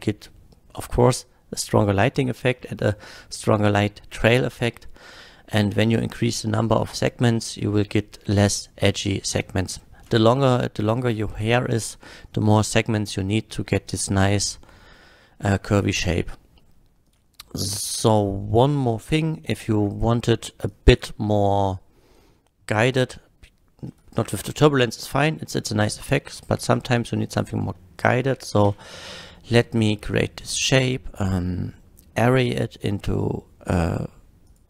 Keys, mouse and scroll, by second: 9.4 middle click, 17.1 click, 18.8 click, 19.5-19.9 middle drag, 20.6 click, 21.4 drag, 23.9 click, 24.7 x, 25.7 click, 26.4 shift+a, 27.3 click, 27.8-28.3 middle drag, 28.6 q, 34.5 click.